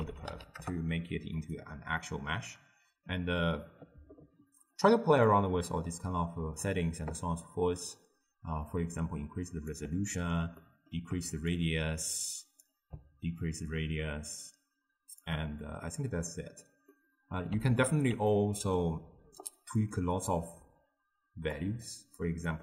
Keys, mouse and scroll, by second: 2.0-4.8 middle drag, 4.8 click, 8.7-10.6 drag, 10.6 middle click, 11.6-15.9 shift+drag, 15.9-19.9 middle drag, 19.9 click, 21.6-22.3 drag.